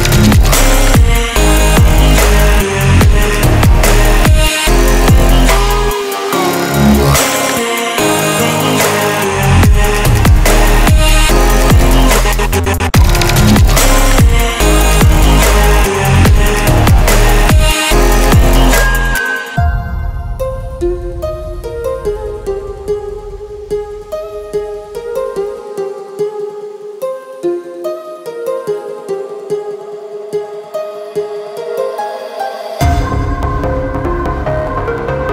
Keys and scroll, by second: 5.8 Up, 5.8 ctrl+z, 13.9 ctrl+z, 30.2 ctrl+z, 31.0 ctrl+z.